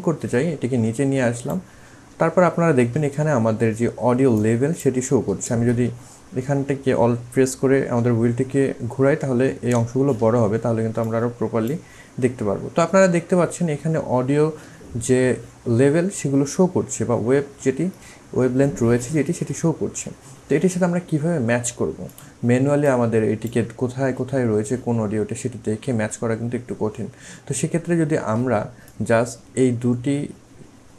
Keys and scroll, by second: 5.6 ctrl+z, 6.3 ctrl+alt+z.